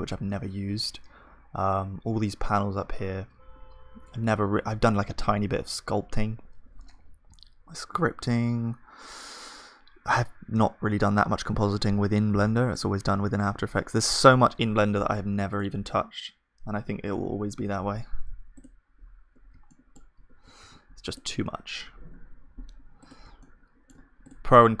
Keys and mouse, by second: 13.7-15.0 drag, 17.2 F3, 17.2-18.6 drag, 19.4 Tab, 20.6 ctrl+s, 22.0-24.8 drag, 22.0 KP_1, 23.4-24.8 middle drag.